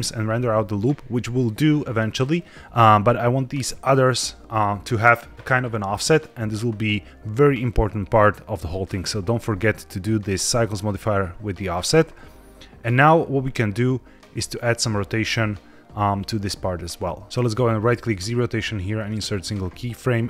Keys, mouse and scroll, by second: 2.1-3.8 drag, 14.4 click, 17.2 ctrl+z, 18.0-19.1 right drag, 20.0-20.2 drag.